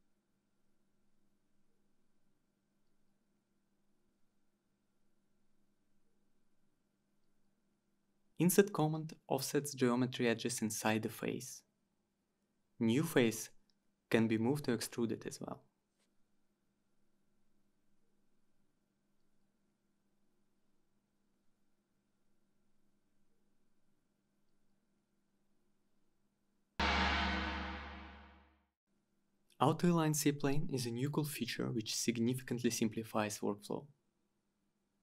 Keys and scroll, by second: 0.1-1.0 typing, 2.3 Return, 4.7-5.4 typing, 5.5 Return, 11.8 Return, 19.3 ctrl+z.